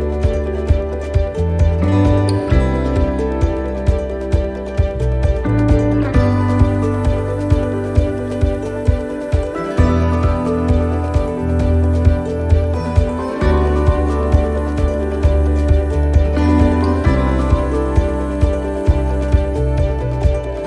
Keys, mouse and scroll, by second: 0.0 click, 0.0 right click, 1.8 right click, 2.0 l, 2.9 click, 5.6 s, 11.9 click, 11.9 right click, 13.4 l.